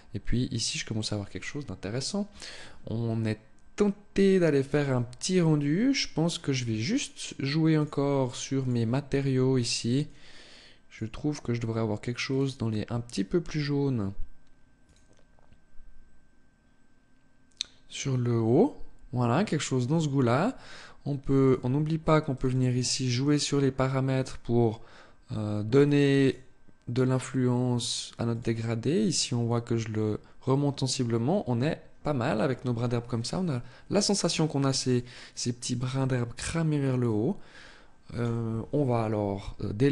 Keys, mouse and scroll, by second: 7.2 click, 8.0 click, 9.5 click, 37.1 click.